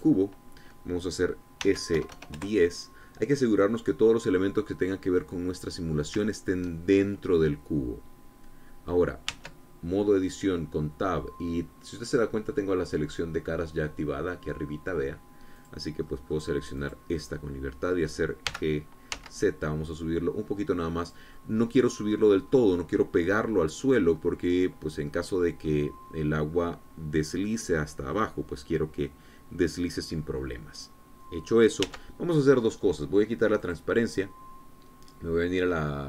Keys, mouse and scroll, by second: 0.5 click, 2.2 s, 2.5 KP_1, 2.7 KP_0, 2.9 KP_Enter, 4.6 scroll down 2, 5.0-6.7 drag, 6.8 shift+click, 7.9-9.7 drag, 9.9 Tab, 10.6-11.0 scroll down 1, 11.7 scroll down 2, 16.2 click, 16.7 middle click, 17.4 click, 17.8 middle click, 19.1 g, 19.7 z, 21.6 click, 22.0 click, 23.1 click, 24.5-25.0 scroll up 1, 25.1 scroll down 1, 25.7 click, 32.4 Tab, 34.2 click.